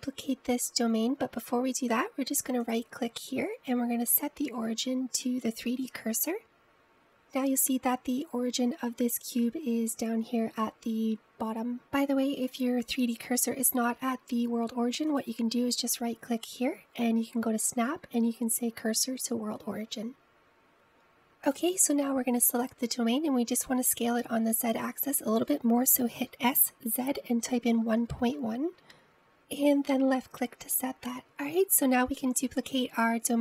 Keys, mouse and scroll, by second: 4.0-6.6 right drag, 16.2-19.3 right drag, 22.6 click, 24.0 scroll down 1, 27.4 s.